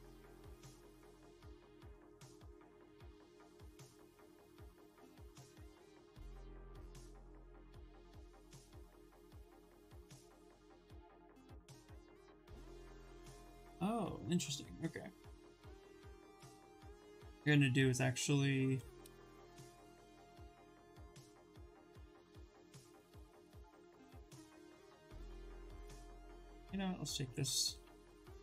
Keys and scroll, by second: 3.4 ctrl+z, 5.7 w, 8.8 ctrl+z, 9.2 q, 16.6 2, 27.3 ctrl+shift+a.